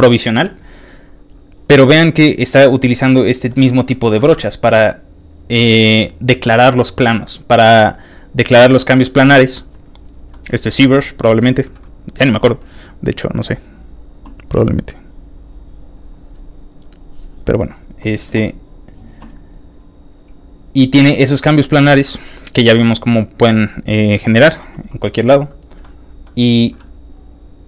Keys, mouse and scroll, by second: 1.8 click, 2.6 scroll up 2, 2.6 middle click, 3.8 middle click, 9.4 middle click, 9.4 scroll down 1, 9.5 middle click, 10.7 middle click, 11.2 middle click, 11.2 scroll up 2, 11.3 scroll down 2, 11.8 click, 12.5 middle click, 12.5 scroll up 1, 13.2 click, 14.6 middle click, 14.6-15.6 scroll down 1, 15.6 click, 15.9 click, 16.9 scroll down 2, 16.9 scroll up 1, 17.2 middle click, 17.3 middle click, 17.7 middle click, 18.6 click, 19.3 click, 24.7-25.2 scroll up 2, 25.8 middle click, 27.2 scroll down 2.